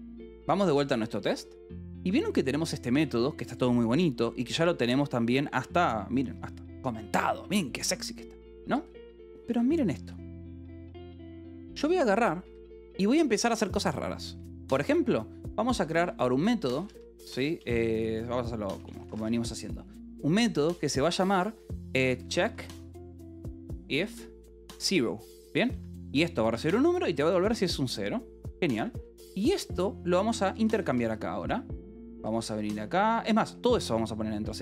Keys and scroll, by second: 0.0-0.3 typing, 0.7 Return, 1.9 j, 2.7 k, 4.2 j, 6.2 shift+k, 7.7 Escape, 9.7 k, 10.3 j, 11.0 o, 12.3 Escape, 12.5 k, 15.4-17.7 typing, 18.8 c, 19.1 t, 19.2 space, 21.7-25.7 typing, 26.9 ctrl+g, 27.3 Escape, 27.7-33.2 typing, 33.0 Escape.